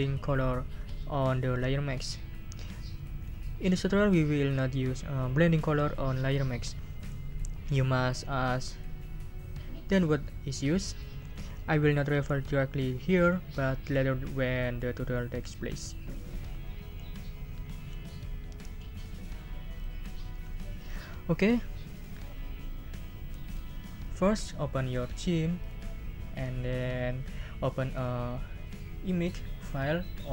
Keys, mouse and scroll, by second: 19.7 click, 25.6 click, 29.6 click.